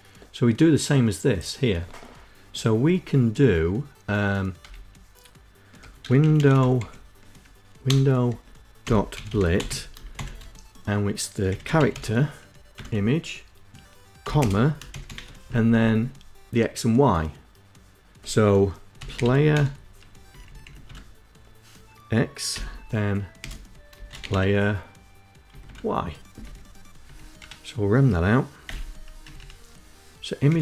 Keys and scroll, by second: 2.7 Return, 3.7-8.3 typing, 9.4-10.6 typing, 10.9 Tab, 12.3-13.7 typing, 13.9 Left, 16.8-18.2 typing, 18.4 Down, 18.6 Down, 18.8 Down, 18.9 Tab, 21.9-22.9 typing, 23.6 Down, 23.8 Tab, 24.5 Down, 25.2 Down, 26.7 ', 27.3 Up, 27.5 Up, 28.6 End, 29.1 Left.